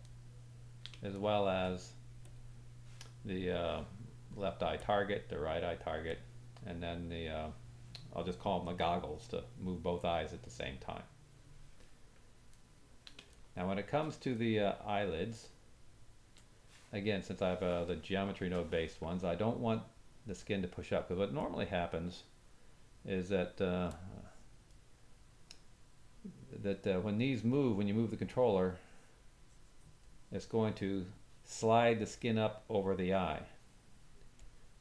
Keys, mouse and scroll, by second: 0.1 ctrl+middle click, 1.1 shift+middle click, 2.2 click, 4.8 click, 6.1-15.3 drag, 12.5 ctrl+middle click, 13.4 shift+middle click, 14.3 middle click, 15.4 ctrl+drag, 15.4 ctrl+middle click, 18.5-34.8 drag.